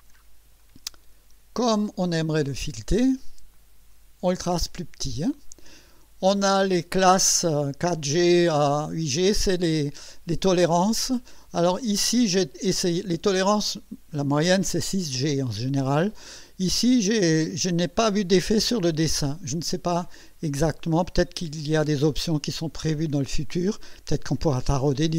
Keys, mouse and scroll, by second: 0.6 click, 2.9 click, 3.5 click, 8.1 click, 10.7 click, 13.3 click, 14.7 click.